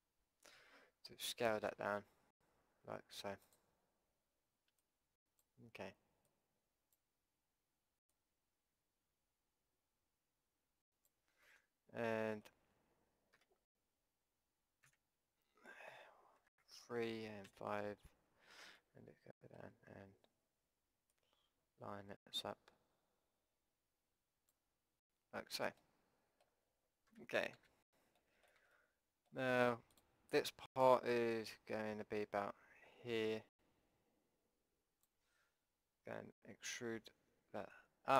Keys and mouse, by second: 0.6 z, 1.8 s, 4.9-10.1 drag, 11.5 middle click, 11.6 click, 13.2 click, 13.4 KP_5, 14.9 KP_1, 16.5 KP_3, 17.5 KP_5, 18.8-20.0 middle drag, 22.9 click, 25.8 click, 27.1 KP_5, 27.6 z, 30.0-33.3 drag, 36.5 e.